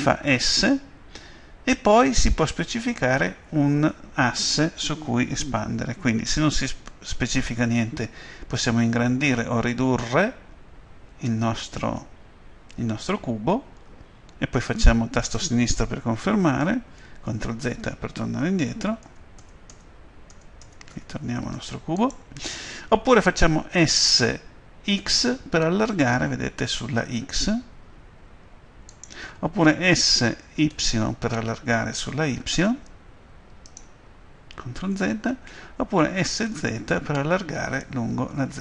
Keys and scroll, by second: 0.4 s, 17.2 ctrl+z, 23.7 s, 25.0 x, 28.3 x, 29.9 s, 30.6 y, 31.5 y, 34.9 ctrl+z, 36.2 s, 36.5 z.